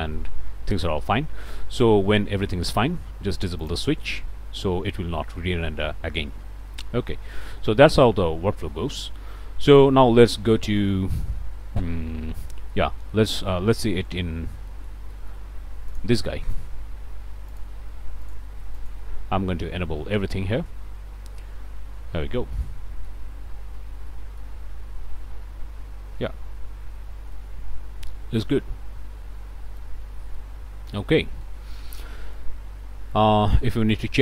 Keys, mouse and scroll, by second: 1.6 click, 3.6 click, 6.4 scroll down 1, 6.7-8.1 drag, 8.4 scroll down 2, 8.7 middle click, 9.3 scroll down 1, 9.7 middle click, 10.5 middle click, 11.3 scroll down 1, 11.8-12.9 drag, 13.1 click, 13.5-14.0 scroll up 1, 14.3 alt+h, 14.7 alt+click, 15.1 shift+click, 15.6 alt+shift+a, 15.9 alt+shift+click, 16.3 alt+shift+click, 17.5 click, 18.2 click, 18.8 click, 22.6 click, 23.8 alt+a, 24.1 alt+click, 25.1 KP_0, 26.6 0, 27.0 middle click, 27.4-30.0 middle drag, 30.0 click, 30.3-31.7 middle drag, 31.7 shift+middle click, 33.1 click, 33.9 click.